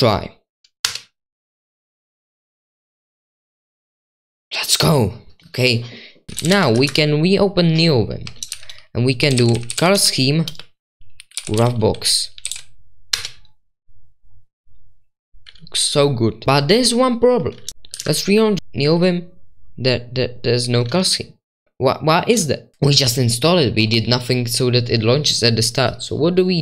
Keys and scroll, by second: 0.8 Return, 6.7 Return, 6.7 Up, 6.7-13.0 typing, 6.8 Return, 13.1 Return, 17.4-18.2 typing.